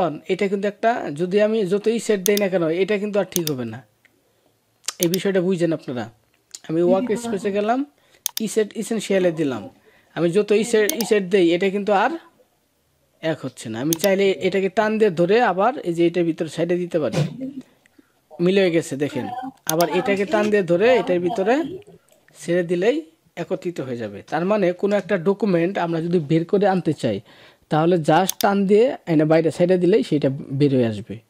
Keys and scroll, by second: 24.1 ctrl+-.